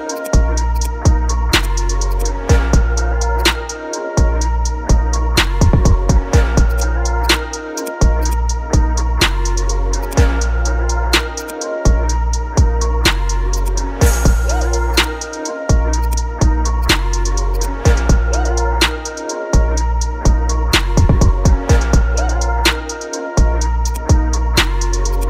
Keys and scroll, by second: 18.1 BackSpace, 18.8 KP_4, 19.1 KP_0, 19.6 Return.